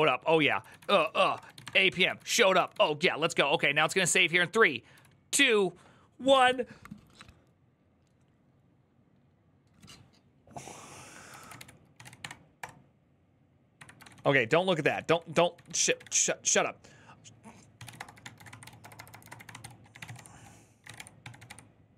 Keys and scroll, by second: 0.0-2.5 typing, 3.8 typing, 11.1-12.3 typing, 12.4 Return, 13.5 Up, 13.7-14.4 typing, 15.7 ctrl+l, 17.3-18.2 typing.